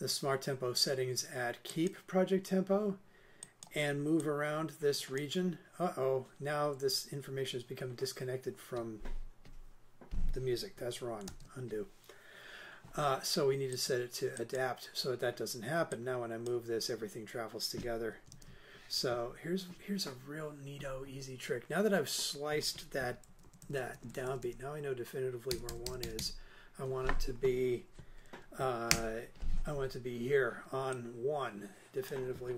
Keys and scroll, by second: 11.3 super+z, 19.3 super+z, 23.3 super+Right, 28.9 Return.